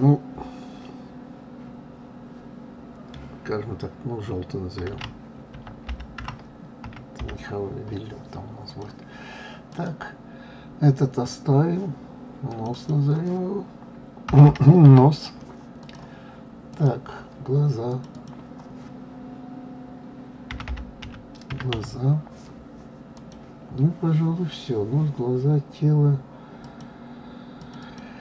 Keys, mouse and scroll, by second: 9.7 click, 12.5 click, 12.7-15.7 drag, 16.7 click, 17.9 click, 18.1-21.1 drag, 26.6 click, 27.6 click, 27.8-28.2 drag.